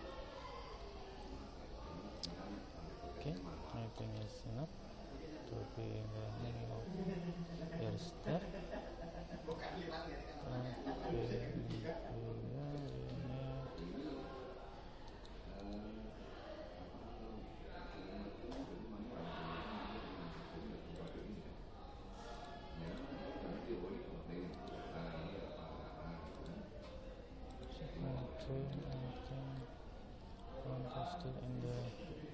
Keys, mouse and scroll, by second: 1.4 middle click, 4.2-5.4 middle drag, 5.5 middle click, 11.4 Tab, 12.8 right click, 14.3 right click, 15.2-16.7 right drag, 17.6 Tab, 19.6 Tab, 23.0 click, 24.6 right click, 26.4 click, 28.8-30.0 middle drag, 30.1-32.3 middle drag.